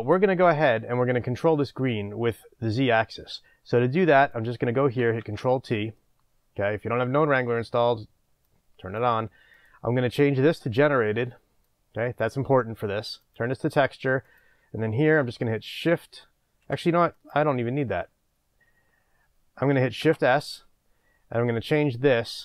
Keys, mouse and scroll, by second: 5.4 ctrl+t, 6.1-11.8 middle drag, 7.7-10.6 scroll down 2, 10.6-11.2 scroll down 1, 11.2-11.8 scroll down 1, 11.8 click, 13.2 click, 14.4-15.0 drag.